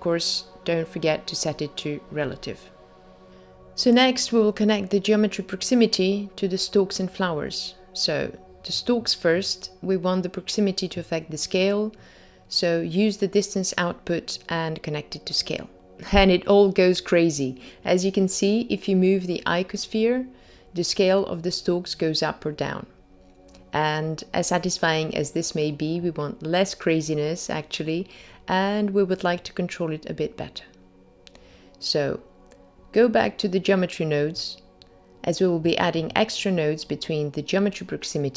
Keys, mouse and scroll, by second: 0.5 click, 0.9 click, 5.5-7.7 scroll down 3, 10.2 click, 15.6-16.3 scroll down 2, 16.3-17.2 scroll down 2, 17.2 click, 18.6 g, 31.3 click, 34.1 click.